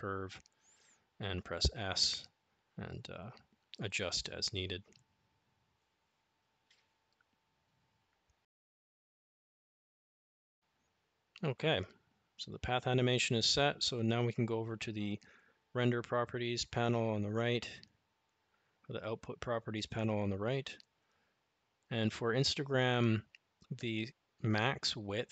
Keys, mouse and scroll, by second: 1.9 s, 14.8 click, 17.9 click.